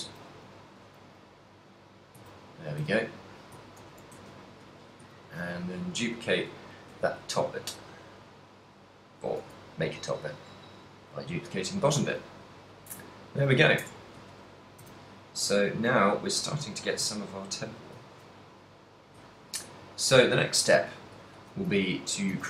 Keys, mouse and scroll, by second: 0.4 ctrl+z, 1.1 g, 2.0 click, 2.4 a, 3.0 a, 3.9 alt+h, 4.4 a, 4.9 l, 5.5 shift+d, 6.6 click, 6.6 g, 8.7 click, 9.7 g, 11.4 click, 13.4 shift+middle click, 14.1 Tab, 14.4 z, 15.0 a, 15.3 middle click, 16.4 middle click, 17.2 ctrl+middle click, 17.4 ctrl+middle click, 17.7 middle click, 18.1 ctrl+middle click, 18.6 middle click, 21.0 ctrl+middle click, 21.6 a, 22.0 middle click, 22.0 a, 22.4 a.